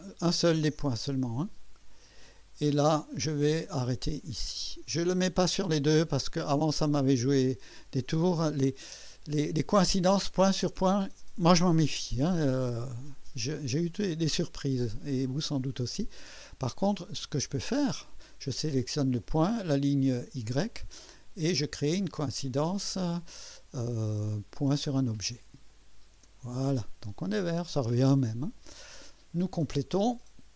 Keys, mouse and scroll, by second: 1.5 click, 4.2 click, 7.3 scroll up 2, 8.0 right click, 15.0 right click, 16.3 click, 18.0 click, 20.4 click, 25.7 click.